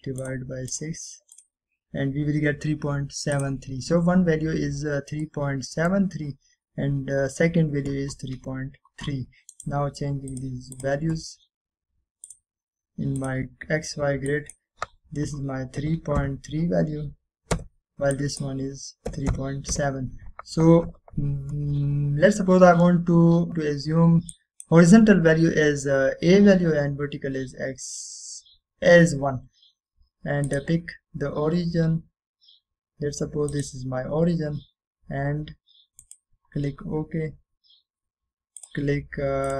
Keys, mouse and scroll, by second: 5.2-5.7 scroll down 1, 6.4-7.2 middle click, 7.4-8.2 scroll up 1, 10.6 right click, 11.4 click, 16.9-17.3 typing, 18.7 typing, 19.2 click, 20.0-21.3 typing, 25.7 drag, 31.6 click, 32.1-34.2 scroll down 1, 34.6 click, 37.1 click.